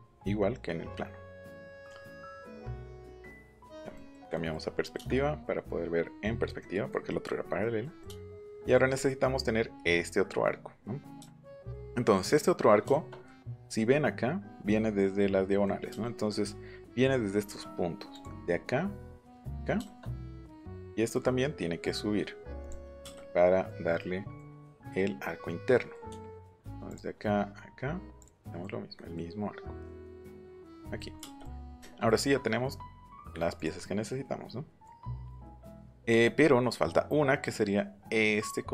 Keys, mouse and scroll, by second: 0.9 middle click, 2.4 click, 3.1 click, 3.5 middle click, 3.9 middle click, 4.3 middle click, 4.9-6.2 shift+middle drag, 6.6 middle click, 7.2 middle click, 7.4 middle click, 7.6 middle click, 8.0 middle click, 8.5 middle click, 11.2 shift+middle click, 11.6 middle click, 12.9 shift+middle click, 18.1 click, 19.4 click, 22.6 middle click, 23.1-24.3 middle drag, 25.7 middle click, 26.8 click, 28.2 click, 28.4 middle click, 30.6 click, 30.9 middle click, 31.2 space, 31.3 middle click.